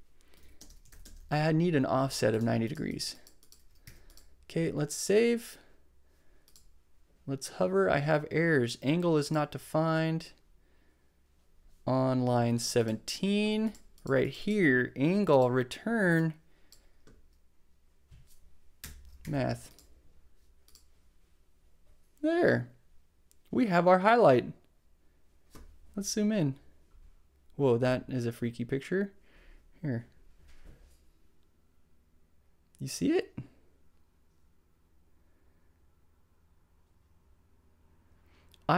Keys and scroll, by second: 0.1-1.0 typing, 2.0 shift+space, 3.8 super+s, 18.8 BackSpace, 19.2 super+s.